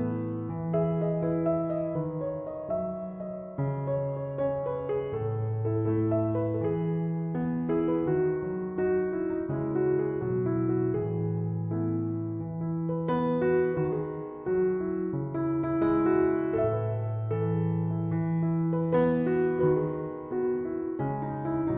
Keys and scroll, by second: 5.1 f, 7.7 s.